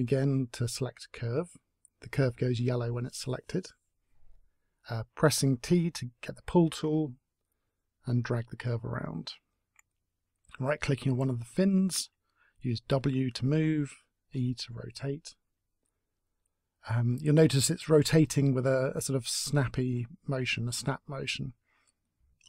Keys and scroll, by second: 7.7 w, 11.0 e.